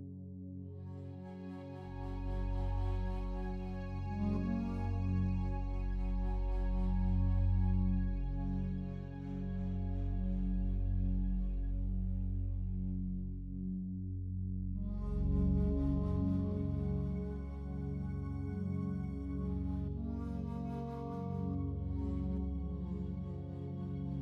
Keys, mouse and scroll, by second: 3.4-4.5 drag, 6.1-11.5 typing, 12.7-13.5 typing, 14.0 click, 14.2 click, 15.2 click, 15.8 click, 16.7 click, 17.6-20.6 typing, 21.5 click, 21.6 click, 21.8-24.2 drag.